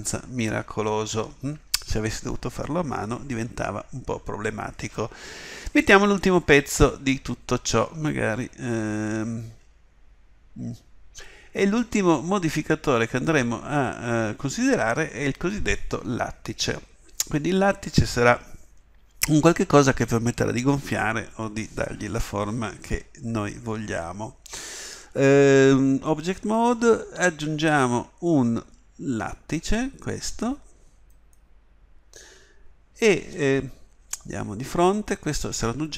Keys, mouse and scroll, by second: 27.2 shift+a, 34.3 KP_1.